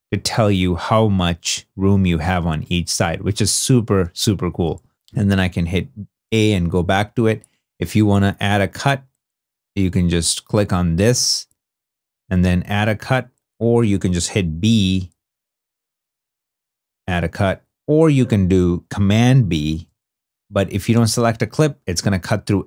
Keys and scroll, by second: 14.3 b, 17.1 a, 19.6 super+b, 22.2 super+z.